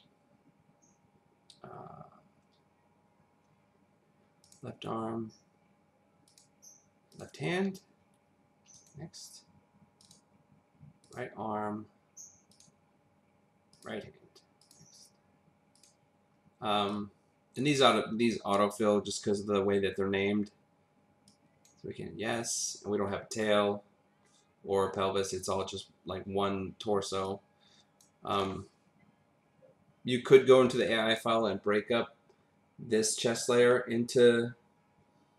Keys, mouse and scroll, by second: 4.4 click, 7.1 click, 8.8 click, 10.0 click, 12.5 click, 14.6 click, 15.8 click, 16.9 click, 21.3 click, 27.2 click, 30.8 click, 33.0 click.